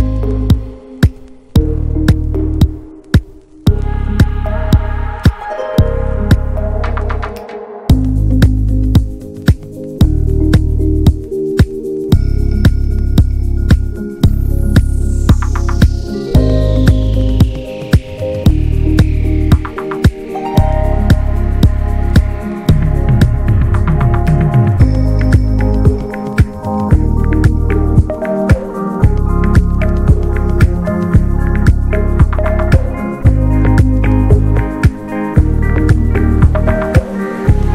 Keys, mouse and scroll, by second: 0.3-3.1 middle drag, 4.1 click, 4.4-5.0 middle drag, 5.0-7.5 drag, 7.5-8.0 scroll down 1, 8.0 scroll up 3, 8.3 click, 8.8 middle drag, 8.9 scroll up 1, 9.1 click, 10.0 ctrl+a, 10.2 click, 10.5 middle click, 11.3 click, 11.6-13.6 middle drag, 13.6 click, 14.3 middle click, 15.0-17.8 drag, 22.3 click, 23.0 scroll down 1, 23.3-25.0 middle drag, 25.0-25.9 scroll up 1, 25.9-27.0 middle drag, 27.0 n, 27.2-31.7 middle drag, 31.7-33.9 drag.